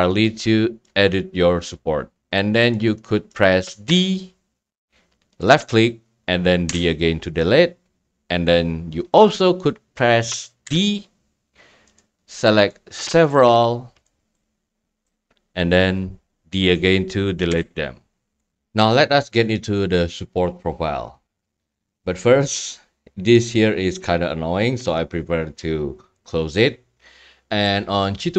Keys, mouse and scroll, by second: 0.7 scroll, 1.8 scroll, 2.7 click, 3.3-3.7 scroll, 3.9 d, 4.3 middle click, 5.5 click, 6.7 d, 10.6 d, 12.0 drag, 13.3-15.0 drag, 15.0 right click, 17.5 d, 26.3 click.